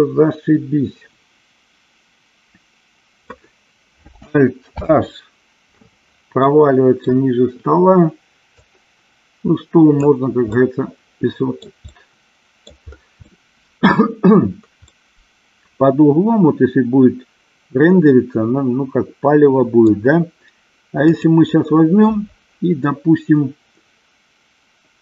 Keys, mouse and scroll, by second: 5.0 alt+h, 6.7-7.4 middle drag, 8.8-10.2 drag, 10.8 scroll up 1, 11.0-12.0 middle drag, 12.2-12.8 middle drag, 13.5 scroll up 1, 13.6 middle click, 15.2-20.2 middle drag, 21.4 click.